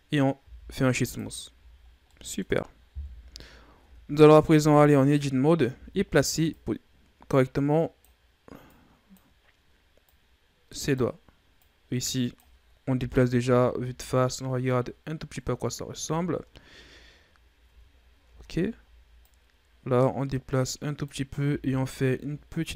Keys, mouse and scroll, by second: 0.3 w, 1.4 a, 1.7 scroll down 2, 1.9-2.9 middle drag, 2.9 KP_3, 3.7 Tab, 4.2 a, 4.9-5.6 scroll up 2, 5.6 a, 6.4-9.3 drag, 9.3-9.9 scroll up 1, 9.9-12.8 drag, 12.8 KP_1, 13.3 Tab, 14.0-15.6 scroll down 10, 15.6-16.4 scroll up 4, 16.4-17.6 ctrl+scroll up 2, 17.6 Tab, 18.2 Tab, 19.1-21.3 drag, 21.3 r.